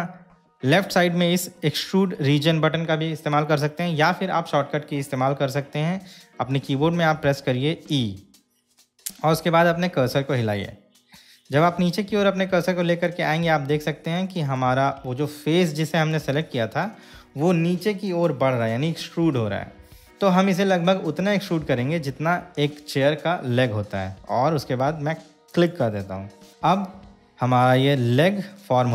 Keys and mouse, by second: 8.2 e, 25.7 click, 27.8-28.9 middle drag.